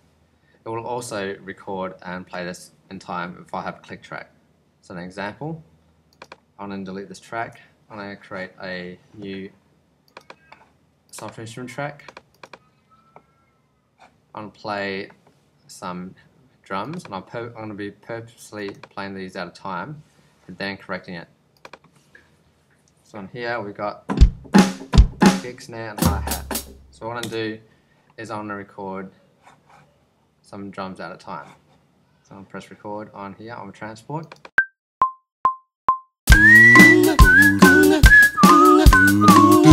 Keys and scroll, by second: 7.4 BackSpace, 27.2 0.